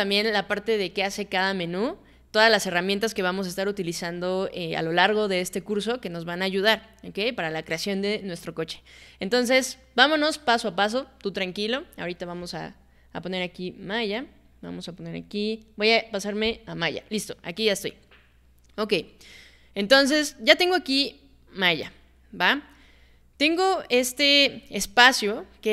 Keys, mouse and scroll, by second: 16.5 click.